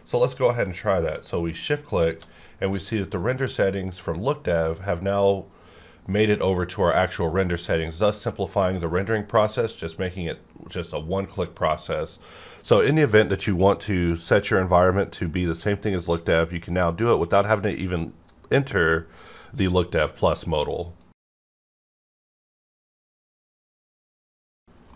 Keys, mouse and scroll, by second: 1.5 shift+click.